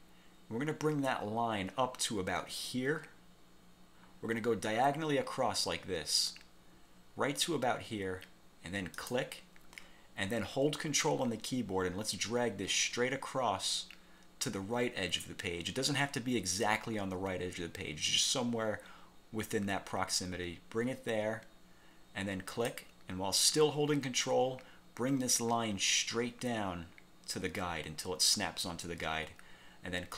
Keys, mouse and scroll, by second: 9.0 click, 22.6 ctrl+click.